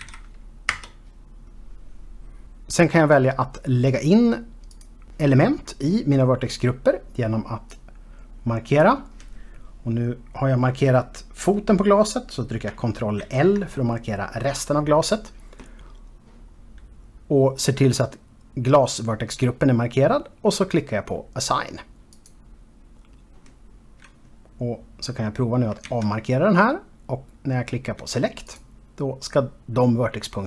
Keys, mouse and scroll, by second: 5.3 click, 8.3 click, 13.8 ctrl+l, 23.4 click, 26.5 alt+a, 29.1 click.